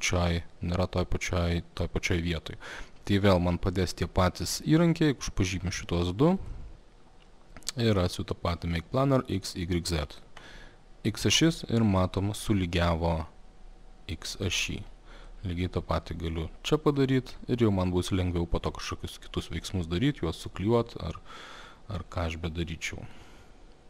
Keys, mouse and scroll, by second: 3.4 click, 3.8 click, 4.7 click, 5.5 click, 5.9 click, 6.4 click, 6.5 click, 7.8 click, 10.5 click, 14.4 click, 14.8 click, 15.3 click, 15.7 click, 17.0 click, 17.9 click, 18.7 click, 19.0 click, 19.5 click, 19.7 click, 23.1 click.